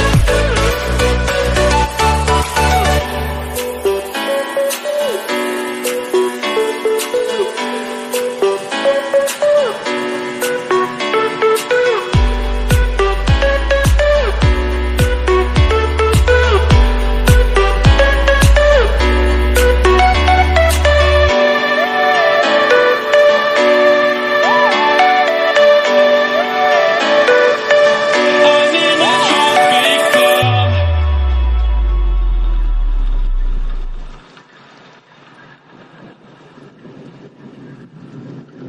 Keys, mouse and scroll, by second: 0.0 click, 0.9-1.5 scroll down 2, 1.5 KP_1, 2.6 scroll up 2, 3.2 scroll down 1, 3.3 Tab, 4.2-4.7 drag, 5.0 Tab, 5.4-5.9 scroll down 4, 5.9 click, 12.4-18.8 drag, 19.2 scroll down 2, 19.4-20.1 scroll up 15, 20.1 click, 20.5-21.0 scroll down 2, 21.0 KP_7, 21.5-22.4 scroll up 2, 22.4 g, 27.8 click, 28.8 click, 30.0 click, 31.1 click, 31.5-33.3 middle drag, 33.3 click, 33.6 shift+click, 34.2 KP_1, 34.9 KP_3, 35.3-36.2 scroll up 6, 36.2 g.